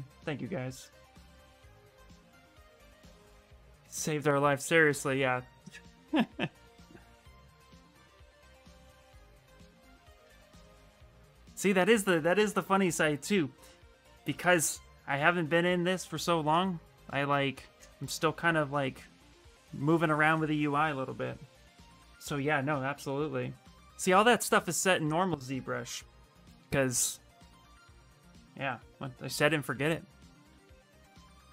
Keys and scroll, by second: 15.7 ctrl+s, 17.0 Return, 17.5 Return.